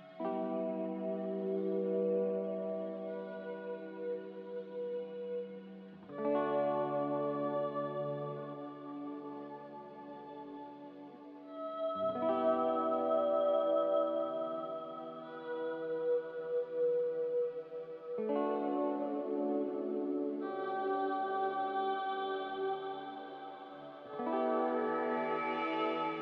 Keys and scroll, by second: 2.7 ctrl+z, 17.9 x, 19.4 z, 21.3 x.